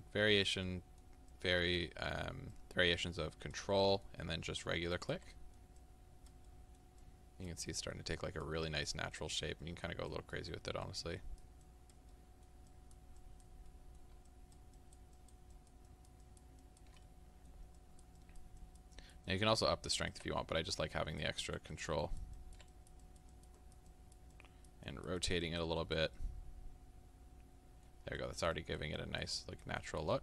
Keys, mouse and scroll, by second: 0.7 middle click, 1.3 click, 2.1 middle click, 2.5-3.7 drag, 3.7 middle click, 4.5 ctrl+click, 5.4 middle click, 5.8 click, 6.5 middle click, 7.0 click, 7.7 middle click, 8.2-9.6 drag, 9.6 middle click, 10.1-12.1 drag, 12.1 middle click, 12.7-13.7 drag, 13.7 middle click, 14.3-17.1 ctrl+drag, 17.1 middle click, 17.8-20.4 ctrl+drag, 20.4 middle click, 21.0-26.2 ctrl+drag, 26.2-28.2 middle drag, 28.2-30.2 ctrl+drag.